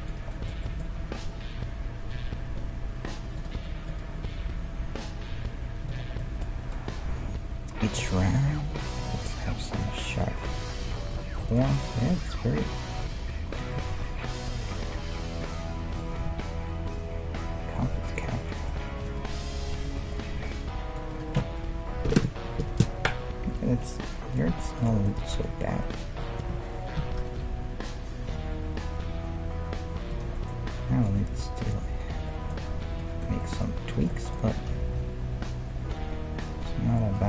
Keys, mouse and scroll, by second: 0.1-1.8 right drag, 1.0 g, 3.9-5.9 right drag, 4.4 g, 6.2-7.8 middle drag, 7.1 KP_1, 10.5 click, 11.0-12.9 right drag, 11.5 click, 11.7-13.5 middle drag, 12.0 g, 13.6-15.3 right drag, 13.8 g, 16.0-17.7 right drag, 16.3 g, 18.4-20.1 middle drag, 19.1-20.1 right drag, 20.3 g, 24.1-25.6 middle drag, 25.4 Tab, 25.6-27.4 right drag, 27.0 shift+d, 27.4 middle click, 30.4 middle click, 31.0-33.4 right drag, 32.0 middle click, 33.2 Tab, 33.4-35.9 drag, 34.4 g, 35.9 middle click.